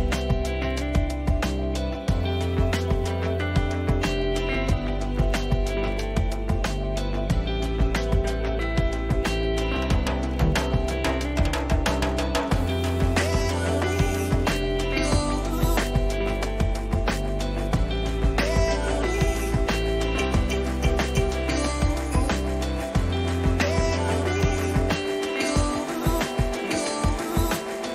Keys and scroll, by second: 26.3 ctrl+j.